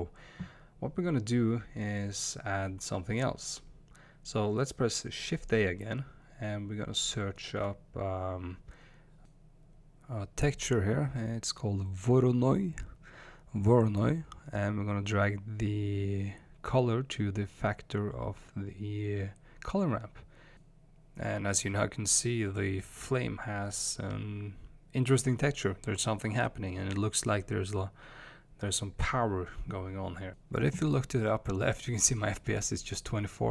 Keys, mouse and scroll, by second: 17.9 click, 18.2 scroll up 1, 18.7 space, 29.2 space, 31.6 space.